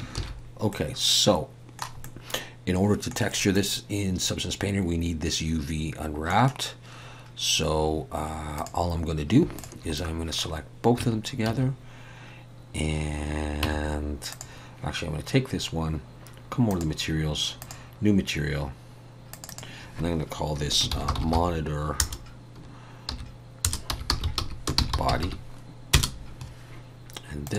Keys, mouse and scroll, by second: 0.2 ctrl+s, 0.7 middle click, 2.0 middle click, 8.5 click, 9.5 shift+click, 9.9 middle click, 11.0 Tab, 11.5 a, 13.6 Tab, 14.3 click, 16.7 click, 20.8 click, 27.4 click.